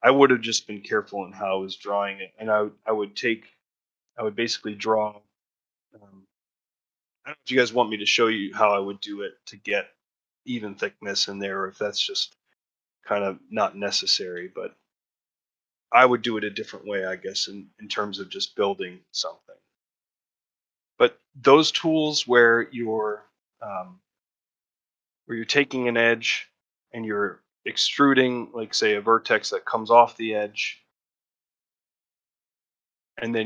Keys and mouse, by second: 6.7 ctrl+middle click, 13.5 ctrl+middle click, 14.4 shift+middle click, 16.5-18.7 middle drag, 19.1 middle click, 20.0 middle click, 21.1 shift+middle click, 21.7 ctrl+middle click, 22.0 shift+middle click, 22.6 middle click, 23.1 shift+middle click, 24.7 click, 25.4 ctrl+middle click, 25.7 shift+middle click, 26.0 middle click, 29.1 1, 29.5 click, 29.9 middle click, 30.6 middle click.